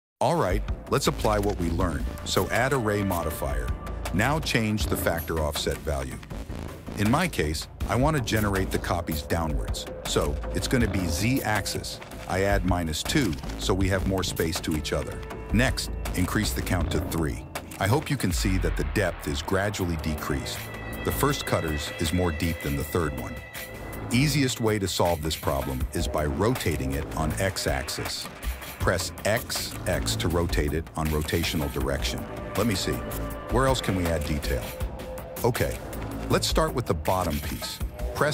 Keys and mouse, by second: 0.0-3.1 drag, 5.8-7.3 drag, 8.2-9.8 drag, 10.8-12.7 drag, 15.8 click, 16.4 click, 17.8 click, 24.0 click, 25.3 r, 36.7 click, 37.2 Tab, 38.2 ctrl+r.